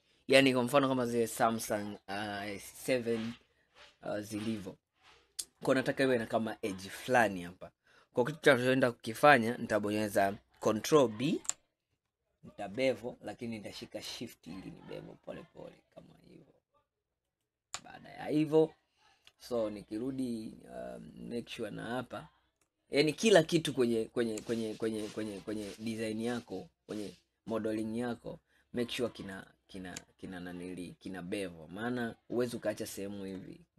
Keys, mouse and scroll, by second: 3.9-4.7 scroll down 1, 4.7-7.7 middle drag, 11.3 ctrl+b, 17.9 scroll down 2, 18.5-21.3 middle drag, 21.3-23.1 scroll up 1, 25.7 click, 27.7 click, 29.4 alt+click, 31.6-32.1 scroll up 2, 32.8-33.7 middle drag.